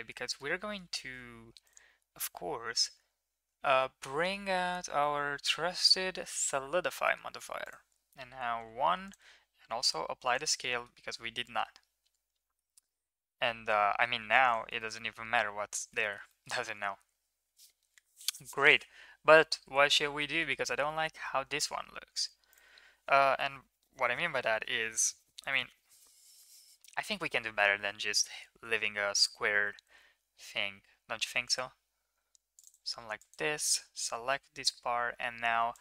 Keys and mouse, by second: 0.1 shift+middle click, 0.4 Tab, 1.6-6.4 drag, 3.4-6.4 right drag, 7.6 click, 9.0 click, 9.7 ctrl+a, 10.6 middle drag, 11.5-12.5 middle drag, 12.9-14.1 middle drag, 14.8 shift+middle click, 15.0 middle drag, 16.0 shift+middle click, 16.3 middle click, 19.4 Tab, 19.8 shift+middle click, 20.2 middle click, 20.4 Tab, 20.8 Tab, 22.4 click, 22.4 right click, 28.1 KP_7, 29.9 ctrl+r, 33.2 click.